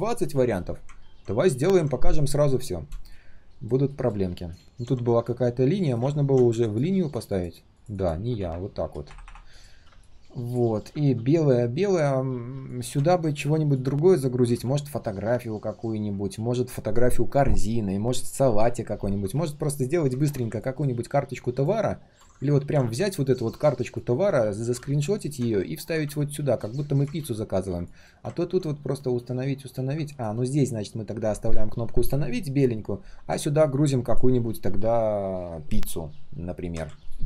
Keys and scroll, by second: 4.6 ctrl+z, 14.5 ctrl+z, 24.1 ctrl+x, 27.2 ctrl+z, 36.8 ctrl+z.